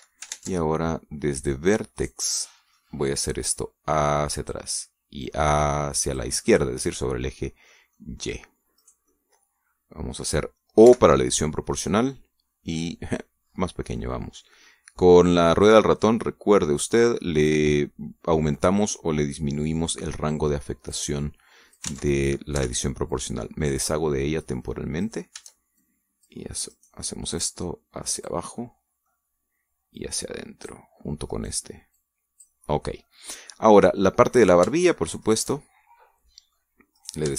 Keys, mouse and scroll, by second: 1.1 ctrl+Tab, 2.2 click, 2.8 right click, 3.1 middle click, 4.3-5.5 drag, 6.0-7.2 drag, 7.3-8.7 middle drag, 8.8 middle click, 9.6 right click, 9.9-11.1 middle drag, 11.7 o, 12.6 click, 13.5 scroll up 1, 14.8-15.5 scroll up 3, 18.5-21.1 middle drag, 21.7-22.8 drag, 22.7 ctrl+z, 23.9-25.4 drag, 25.8 right click, 26.7 shift+click, 27.5 right click, 28.2-29.3 drag, 29.4 middle click, 30.8 click, 32.1 right click, 32.8 click, 33.5-34.7 middle drag, 35.2 shift+right click, 36.1 shift+right click, 36.4-37.3 shift+middle drag.